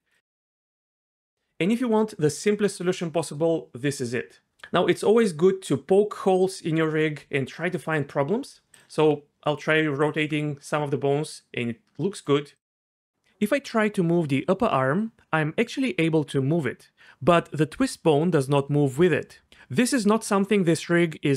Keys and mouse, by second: 9.0 r, 9.5-10.1 drag, 10.2 r, 14.4-17.4 g, 17.8 g.